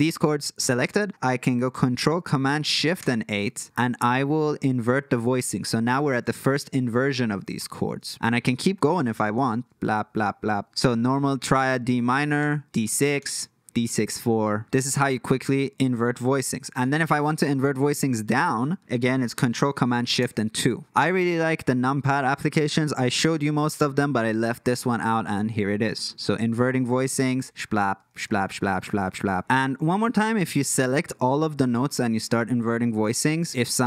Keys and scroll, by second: 3.0 ctrl+shift+super+KP_8, 8.1 super+z, 9.7 ctrl+shift+super+KP_8, 9.9 ctrl+shift+super+KP_8, 10.2 ctrl+shift+super+KP_8, 12.4 ctrl+shift+super+KP_8, 13.2 ctrl+shift+super+KP_8, 14.1 ctrl+shift+super+KP_2, 14.4 ctrl+shift+super+KP_5, 20.2 ctrl+shift+super+KP_2, 27.4 ctrl+shift+super+KP_8, 27.9 ctrl+shift+super+KP_2, 28.2 ctrl+shift+super+KP_2, 28.6 ctrl+shift+super+KP_2, 28.9 ctrl+shift+super+KP_2, 29.3 ctrl+shift+super+KP_8, 31.9 ctrl+shift+super+KP_8, 32.9 ctrl+shift+super+KP_2.